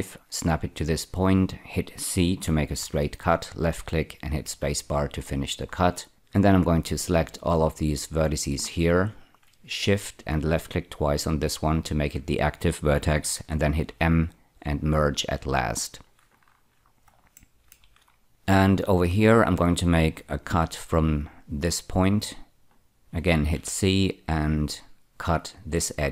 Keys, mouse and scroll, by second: 0.7 click, 2.7 c, 3.5 click, 4.3 space, 5.1-6.1 scroll up 4, 6.5-8.0 drag, 8.6-9.6 scroll up 4, 10.5 shift+click, 10.8 shift+click, 13.9 m, 15.3 click, 16.2-16.7 scroll down 8, 17.3 shift+middle click, 18.1-18.8 scroll up 2, 20.5 k, 22.2 click, 23.5 c, 25.9 click.